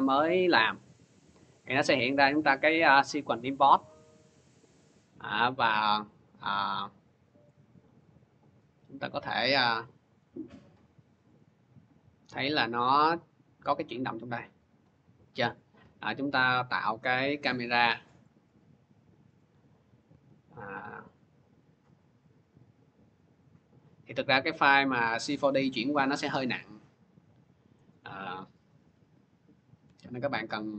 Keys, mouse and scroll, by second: 3.5 click, 3.7 click, 8.2 click, 10.0 click, 15.3 click, 16.7 click, 18.2 click, 19.4 click, 19.9 c, 22.1-24.4 drag, 27.7-30.7 drag, 29.7 c, 30.5 c.